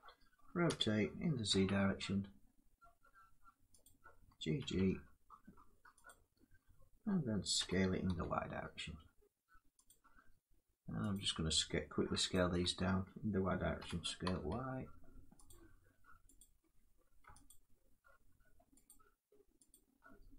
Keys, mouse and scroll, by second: 0.4 r, 1.2 z, 3.5 click, 3.8 r, 4.3 g, 5.8 click, 7.3 s, 7.8 y, 8.1 g, 8.1 s, 9.6 click, 10.5 y, 10.9 click, 12.0 alt+click, 13.5 s, 13.9 y, 15.0 s, 15.0 y, 15.2 click, 15.4 s, 16.1 click, 16.3 alt+click, 17.2 alt+click, 18.6 click, 19.4 click.